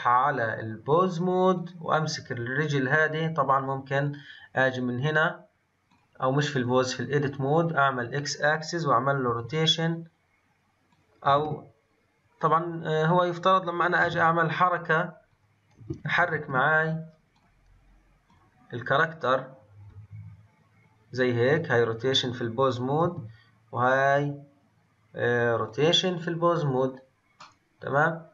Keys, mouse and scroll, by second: 4.0 click, 5.8-9.0 drag, 11.4 ctrl+z, 12.3 click, 15.9 ctrl+z, 16.4 ctrl+z, 17.3-19.9 drag, 19.9 r, 22.0 click, 23.0 r, 27.3-28.3 middle drag.